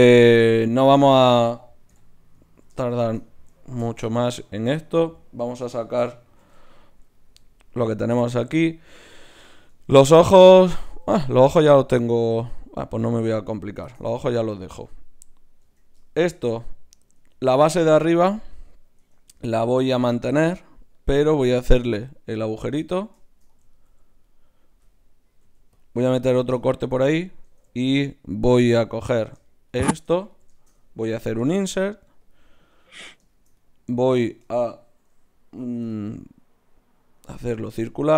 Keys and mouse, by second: 0.8 Tab, 1.9 KP_Divide, 4.3-6.0 drag, 6.0-7.8 middle drag, 6.4 alt+h, 7.8-10.6 drag, 9.7 Tab, 10.6 Tab, 10.6 middle click, 12.2 click, 13.3-14.7 right drag, 15.6 Tab, 17.1 Tab, 19.0 Tab, 25.4 ctrl+r, 27.5 ctrl+Tab, 30.3 click, 31.2 i, 34.3-35.8 middle drag, 35.8 w, 37.9 middle click.